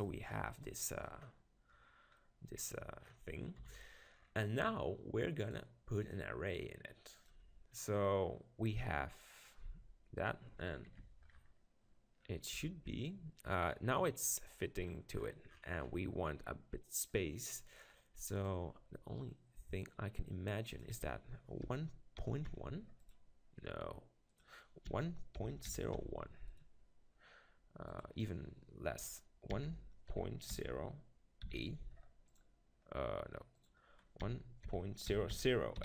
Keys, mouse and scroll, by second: 0.4-4.2 middle drag, 0.6 click, 3.6 KP_7, 5.4-7.8 drag, 8.2-9.8 middle drag, 9.8 Tab, 10.2 click, 12.6 Tab, 18.4-20.3 drag, 20.7-22.6 drag, 24.3-26.2 drag, 27.9-29.7 drag, 33.5-35.3 drag, 35.3 0, 35.4 click.